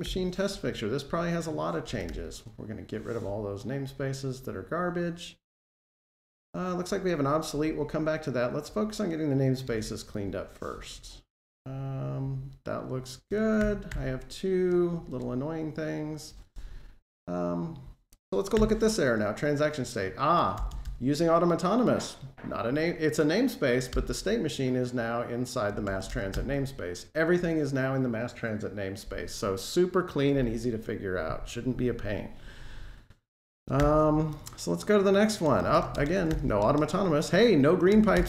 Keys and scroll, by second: 2.0 super+e, 9.6 super+v, 15.0 ctrl+Tab, 18.3 F12, 23.8 alt+Return, 26.1 Delete, 33.6 alt+shift+Page_Down, 36.1 Delete.